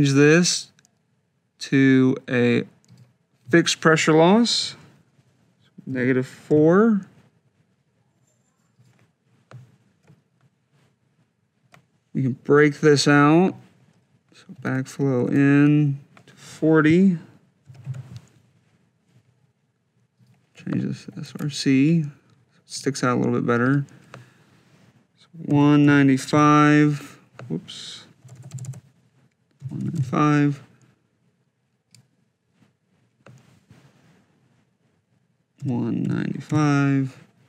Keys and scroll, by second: 5.7 -, 6.3 4, 14.4 shift+b, 15.0 shift+i, 15.9 Tab, 17.4 4, 17.9 0, 21.1 shift+r, 22.2 shift+c, 25.6 6, 26.1 5, 28.2-30.1 typing, 35.5-36.8 typing.